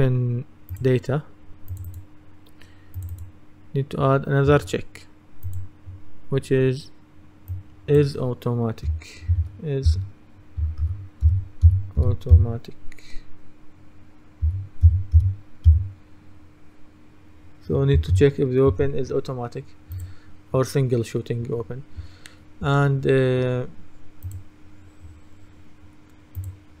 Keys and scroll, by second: 9.4-12.9 typing, 14.3-15.8 typing, 18.0 shift+/.